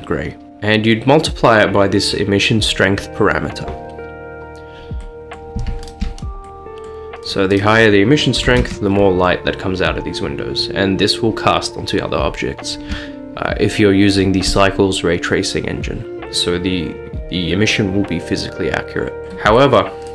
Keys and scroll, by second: 8.5 typing, 8.7 Return, 13.2 typing, 19.2 x.